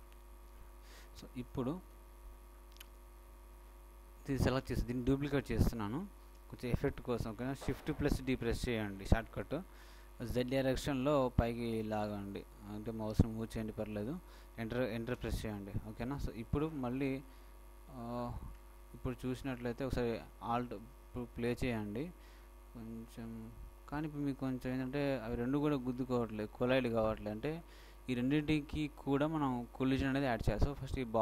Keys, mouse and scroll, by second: 2.2-3.3 shift+middle drag, 4.3-5.3 right drag, 5.0 click, 5.3 middle click, 6.0 click, 8.4 shift+d, 16.8 shift+middle click, 17.9 shift+middle click, 20.9 alt+a, 27.4 Escape, 27.5 Escape, 29.1-30.2 middle drag, 30.9 click, 30.9-31.2 right drag.